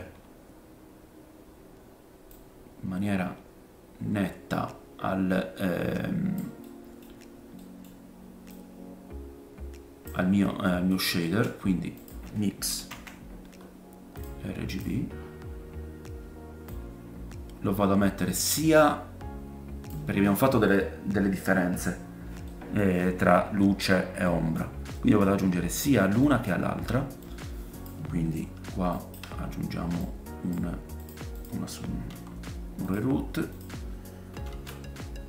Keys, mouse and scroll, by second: 2.3 click, 7.0-7.6 scroll up 3, 7.6 middle click, 8.5 click, 10.3 scroll up 2, 11.1-14.8 shift+middle drag, 11.2 shift+a, 14.8-16.7 drag, 15.1-16.7 scroll up 4, 16.7-25.1 middle drag, 20.1-20.6 scroll down 4, 21.5-22.4 scroll up 1, 26.3 middle click, 26.3-27.2 scroll up 3, 27.2 click, 28.9 shift+right click, 30.0 click, 31.1 click, 31.4-33.5 drag, 32.1 g, 33.6-35.2 shift+drag, 34.5 shift+d.